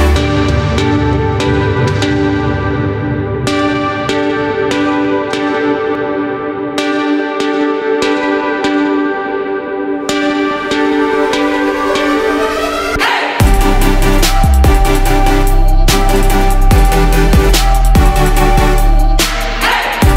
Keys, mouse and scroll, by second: 1.2 right click, 2.7-5.0 drag, 5.0 Left, 5.3 Left, 5.6 typing, 9.5 Left, 9.8 Left, 10.2 Left, 10.4 typing, 11.8-20.1 drag.